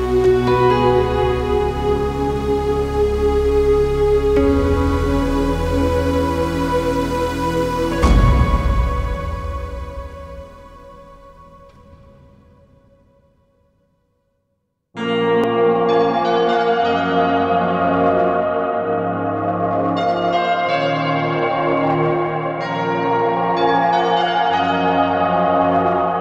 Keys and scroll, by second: 1.7 Escape, 14.9 Escape, 18.9 Escape, 20.1 alt+z, 20.8 Escape, 22.1 ctrl+z.